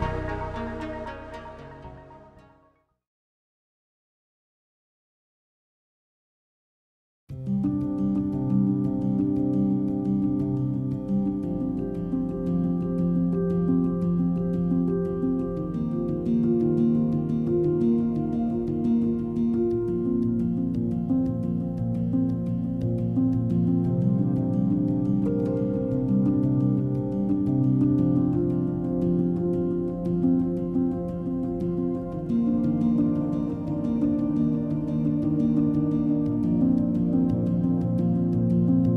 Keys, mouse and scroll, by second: 0.1 KP_3, 4.6 click, 5.8 click, 6.7-8.5 drag, 8.5 g, 12.1-14.4 shift+drag, 16.1 r, 28.1 click, 29.0 g, 32.6 shift+a, 37.3-38.5 middle drag, 38.5 g.